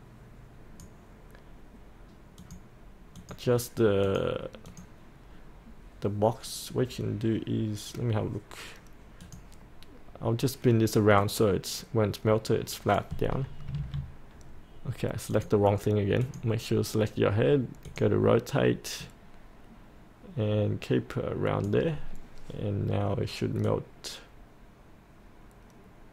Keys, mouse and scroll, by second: 13.8 ctrl+z, 15.3-26.1 drag.